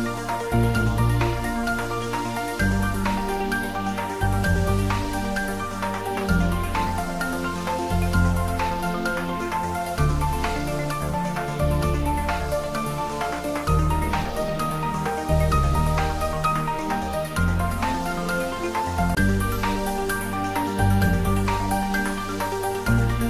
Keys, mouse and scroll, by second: 0.1 click, 0.9 r, 1.5 click, 2.0 g, 2.3 y, 3.1 click.